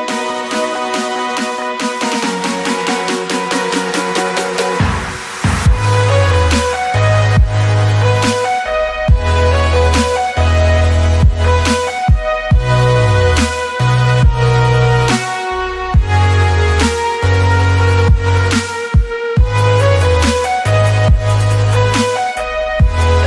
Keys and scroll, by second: 2.1 Escape, 4.7 Escape, 5.5 Escape, 5.8 ctrl+c, 7.1-8.4 typing, 8.4 Escape, 11.6 Escape, 14.6 Caps_Lock, 14.7-16.1 typing, 14.9 Tab, 16.5 Escape, 20.3 space, 21.0 space, 21.0 b, 21.5 space.